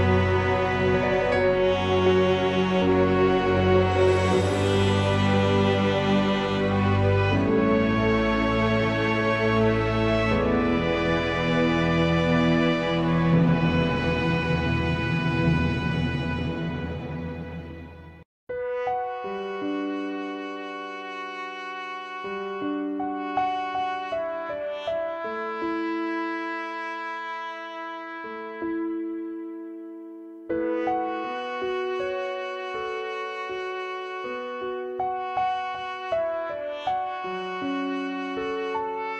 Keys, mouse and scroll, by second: 2.3-3.6 drag, 4.4 click, 4.5 g, 5.3 click, 5.4 g, 6.4 shift+click, 7.2 g, 8.6 shift+click, 9.0 g, 10.6 click, 10.9 g, 12.6 shift+click, 14.7 click, 15.4 e, 17.6-18.7 middle drag, 18.7 click, 20.2-21.4 middle drag, 21.4 shift+click, 21.9-22.7 middle drag, 22.7 shift+click, 23.7-24.5 drag, 24.5-25.4 middle drag, 25.4 shift+click, 25.9-27.1 right drag, 27.1 shift+click, 28.0 g, 29.1 shift+click, 30.1-30.9 drag, 31.4-32.6 right drag, 32.6 shift+click, 32.8 g, 34.1 click, 34.2 g, 36.4 click, 37.1-37.9 drag, 37.9 scroll down 2, 38.7-39.1 middle drag.